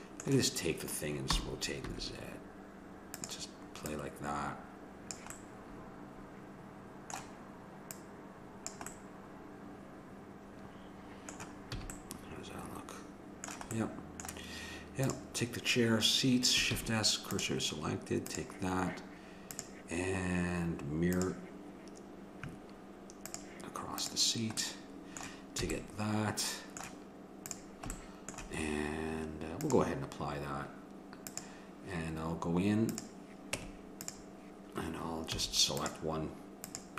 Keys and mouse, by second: 1.3 r, 3.9-5.6 drag, 5.4-7.1 middle drag, 7.9-9.7 drag, 8.9-10.5 middle drag, 11.8 a, 15.1-16.9 drag, 16.9 shift+s, 18.5-21.3 drag, 23.3-25.1 drag, 24.6-26.0 middle drag, 25.7 a, 27.6-29.3 drag, 29.3 middle click, 29.7-34.7 drag, 33.6 Tab, 35.4 a, 35.8-36.9 drag.